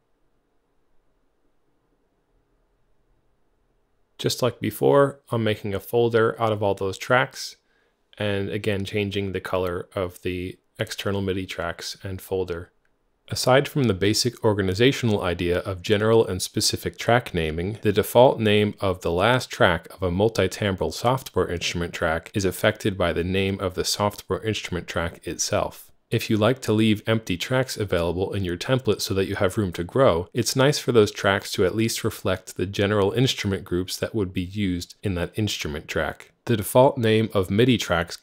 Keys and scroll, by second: 2.1-3.0 typing, 5.3 shift+super+f, 5.8 ctrl+super+Right, 13.7-17.4 typing, 23.4-25.4 typing, 25.8 Return, 34.8 BackSpace.